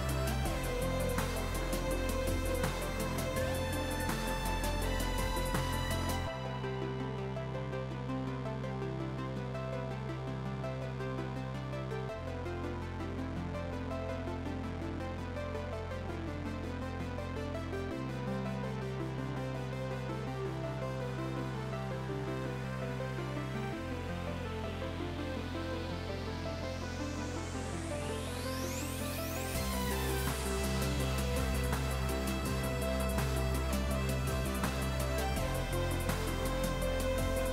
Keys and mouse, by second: 1.0 KP_1, 1.1 Return, 3.5 click, 4.9 click, 5.2 a, 5.3 click, 5.9 KP_1, 6.0 Return, 6.4 click, 6.6 ctrl+shift+a, 6.7 click, 7.2 click, 7.9 KP_1, 8.0 Return, 8.4 click, 9.8 click, 10.5 click, 10.7 Up, 11.1 click, 12.3 click, 14.8 click, 17.7 click, 19.1 shift+click, 19.9 click, 20.4 x, 21.1 right click, 21.4 click, 21.6 ctrl+shift+x, 22.2 2, 22.3 Return, 22.6 ctrl+x, 23.8 click, 26.6 y, 26.8 click, 27.4 click, 28.2 click, 30.3 KP_0, 30.4 Return, 30.7 click, 32.1 Right, 32.3 click, 32.9 click, 33.8 right click, 34.2 click, 36.3 click, 36.5 ctrl+click, 37.4 Delete.